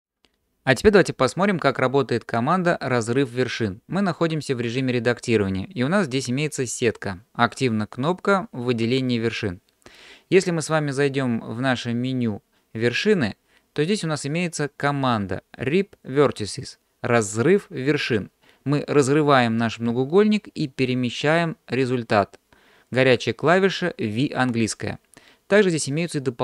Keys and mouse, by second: 12.9-26.4 drag.